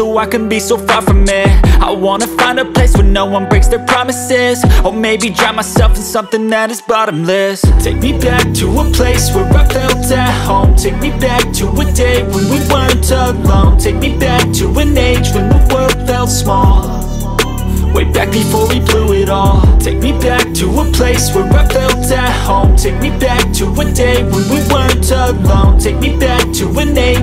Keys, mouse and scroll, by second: 1.2 click, 1.8 right click, 6.4 click, 8.4 right click, 9.6 click, 12.0 scroll up 1, 14.9 click, 20.3 space, 20.4 click, 20.5 space, 21.2 click, 22.4 space, 22.6 click, 22.7 space, 24.1 click.